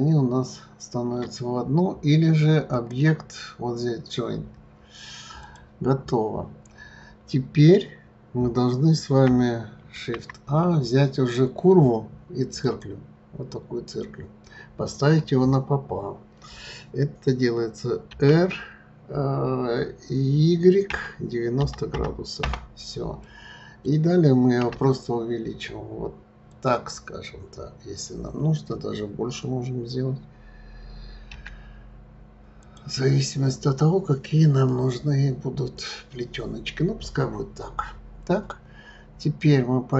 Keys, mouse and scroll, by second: 2.7 click, 6.2-7.1 scroll down 5, 7.1-9.4 scroll down 5, 9.4 scroll down 2, 9.9 shift+a, 13.4-14.4 scroll down 4, 18.1 r, 23.2-24.6 middle drag, 24.6 s, 27.1-30.5 scroll down 4, 31.3 s, 34.6-37.7 middle drag, 39.1-39.5 scroll up 3.